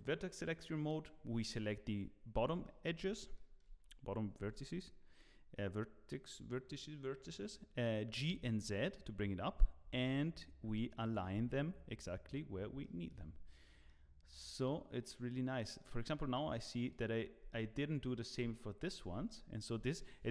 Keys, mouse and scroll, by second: 2.3 scroll up 1, 2.6 shift+middle click, 3.0 scroll up 3, 3.3 shift+middle click, 4.4 g, 12.2-12.7 scroll down 2, 12.8 shift+middle click.